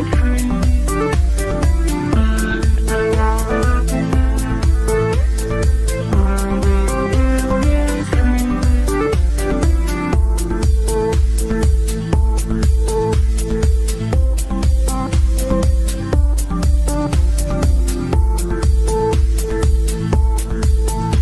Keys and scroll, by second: 18.4 c.